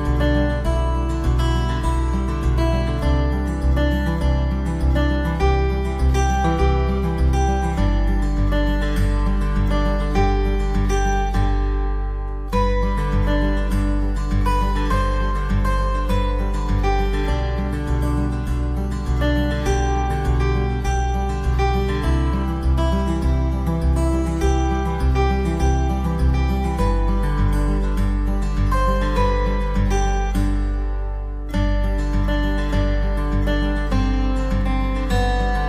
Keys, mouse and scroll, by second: 6.7 click, 9.3 click, 11.6 click, 14.6 click, 15.4 click, 17.7 click, 19.7 click, 24.9 click, 27.2 click, 34.1 click.